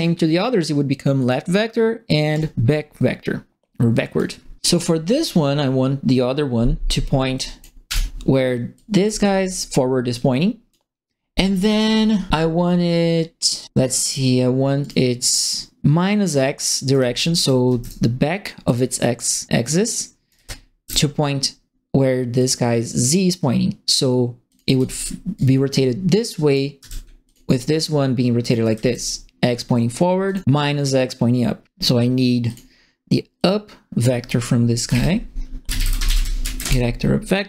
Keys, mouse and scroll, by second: 1.1 click, 2.3 click, 3.9 click, 7.3 click, 7.8 Delete, 8.7 click, 10.1 click, 14.0 click, 14.8 right click, 16.9 right click, 16.9-18.1 typing, 18.6 click, 20.0-20.9 typing, 20.2 right click, 22.3 click, 24.4 click, 24.7 e, 25.3-26.5 drag, 26.7 w, 27.2 click, 28.3-29.2 typing, 28.5 right click, 30.2 click, 32.4 click, 33.3 click, 34.8-36.4 typing, 36.6 Return.